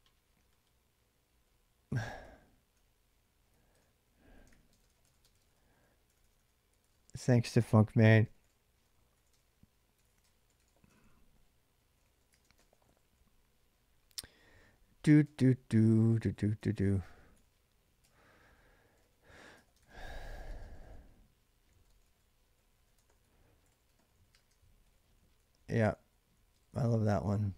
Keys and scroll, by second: 1.6-13.1 typing, 15.0 ctrl+[, 15.1-26.5 typing, 19.3 ctrl+[.